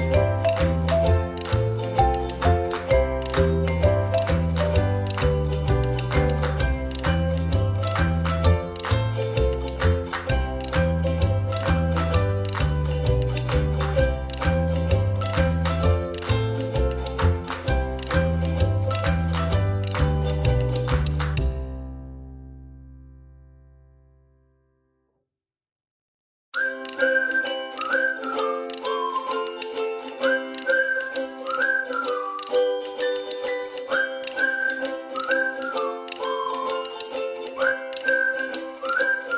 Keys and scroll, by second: 18.4 ctrl+z, 19.9 ctrl+z, 20.1 ctrl+z, 20.3 ctrl+z, 20.6 ctrl+z, 21.2 ctrl+z, 21.6 ctrl+z, 29.6 a, 30.2 Right, 30.4 Right, 31.5 Left, 31.7 Left, 36.1 space, 38.6 Up, 38.9 Down.